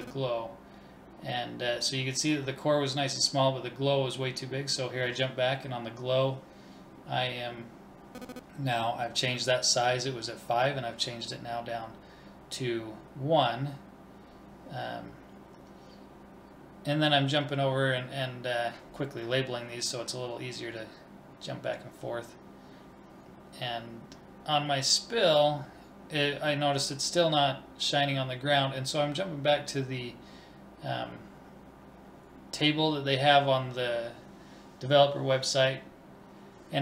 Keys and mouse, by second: 1.1-4.0 drag, 14.7-17.8 drag, 19.1 l, 30.4-32.2 drag.